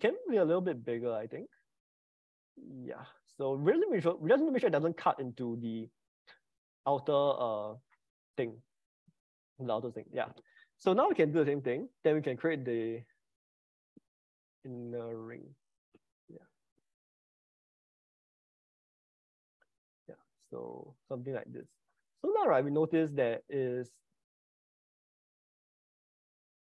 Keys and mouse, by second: 11.5 ctrl+c, 12.1 ctrl+v, 12.5 s, 23.1-26.7 middle drag.